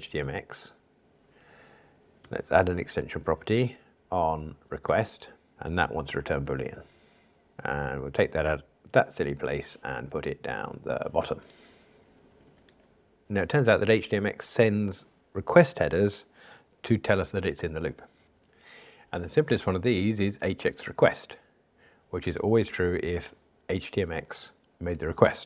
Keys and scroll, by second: 0.0 alt+Return, 6.4 Return, 7.7 alt+Up, 9.0 super+x, 12.5 super+x, 12.8 super+v.